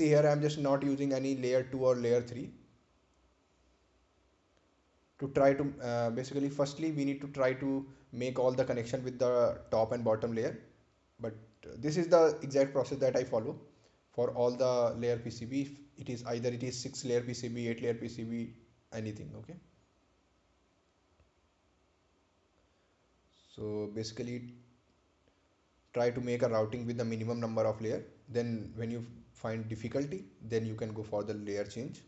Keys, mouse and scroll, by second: 5.5 click, 11.2 click, 12.5 right click, 13.5 scroll down 1, 16.5 ctrl+click, 17.7 scroll up 1, 18.1-18.6 scroll down 1, 20.8 click, 22.9 scroll up 1, 27.2 click, 31.5 scroll down 1.